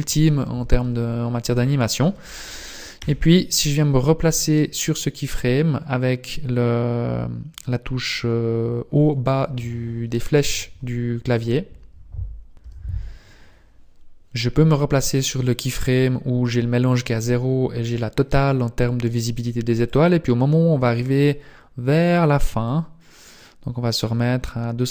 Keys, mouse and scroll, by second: 12.7 click, 14.6-16.2 scroll down 4, 16.2-17.2 scroll up 1, 17.2-17.6 scroll up 1, 19.0 click, 20.0 click, 22.5 click.